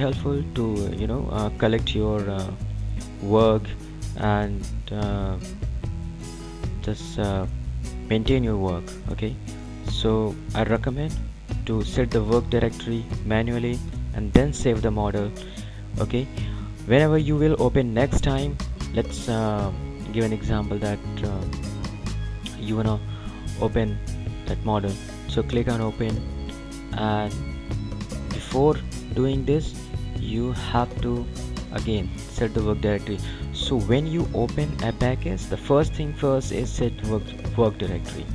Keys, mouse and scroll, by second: 19.1 click, 21.9 click, 24.5 click, 30.1 click.